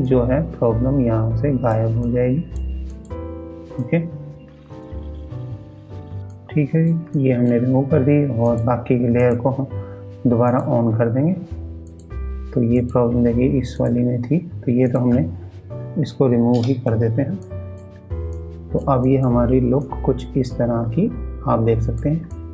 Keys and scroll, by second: 18.8 ctrl+space.